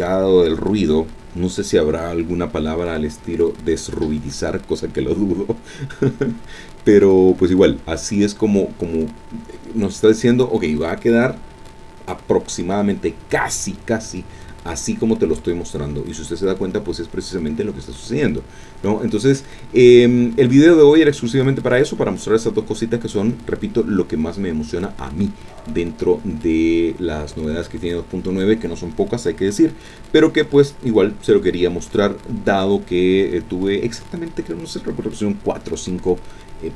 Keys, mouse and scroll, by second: 14.8-15.7 scroll down 2.